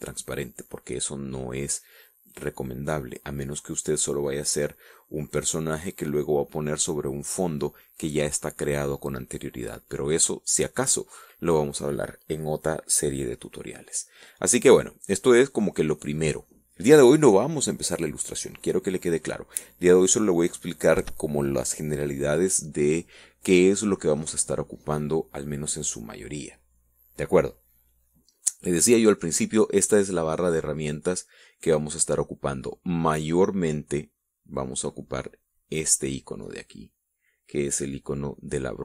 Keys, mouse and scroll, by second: 36.1 click.